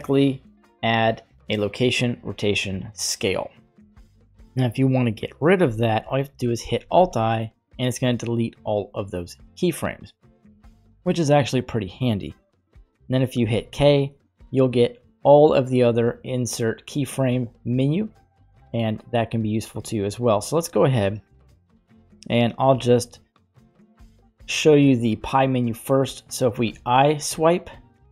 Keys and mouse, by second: 4.5-5.2 middle drag, 6.8 alt+i, 12.8 middle click, 13.5 k, 18.4 right click, 19.4 right click, 26.7 i.